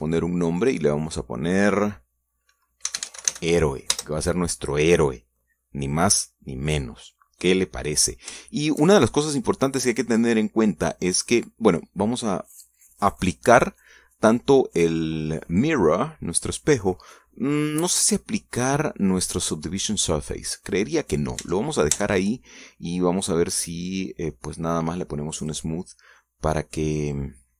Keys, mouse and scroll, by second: 0.0 click, 1.8 click, 4.0 h, 4.1 e, 4.3 o, 4.4 e, 5.0 Return, 9.3 scroll down 1, 9.6-10.9 shift+drag, 11.0 scroll up 2, 11.4-12.5 middle drag, 13.7 click, 17.6 click, 21.0 scroll down 2, 21.3-22.5 middle drag, 22.6 Tab, 23.4-25.6 middle drag, 26.6 click, 27.1 scroll down 1, 27.4-27.5 middle drag.